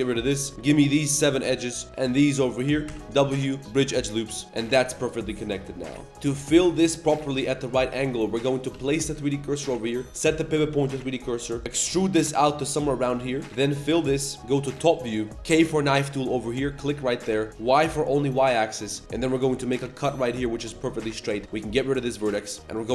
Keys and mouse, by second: 0.4 1, 0.5 2, 0.8 ctrl+click, 2.3 ctrl+click, 2.8 w, 4.5 middle click, 4.9 middle click, 5.4 middle click, 5.8 middle click, 6.1 1, 6.5 middle click, 7.4 middle click, 7.6 middle click, 7.9 middle click, 8.3 1, 8.4 click, 8.7 shift+s, 9.8 click, 11.1 click, 11.5 click, 11.9 e, 11.9 s, 13.3 click, 13.4 2, 13.9 f, 14.0 click, 14.9 shift+KP_7, 15.2 shift+click, 15.2 shift+middle click, 15.3 a, 15.4 k, 20.6 1, 20.9 click, 21.4 x, 22.0 shift+middle drag, 22.6-22.9 typing, 22.6 click.